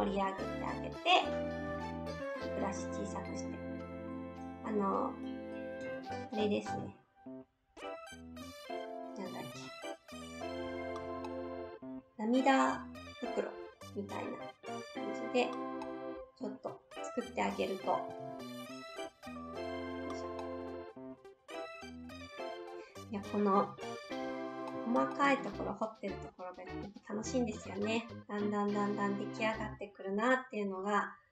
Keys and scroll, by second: 1.6 s, 6.6 ctrl+z, 9.5 ctrl+z, 18.2 ctrl+z.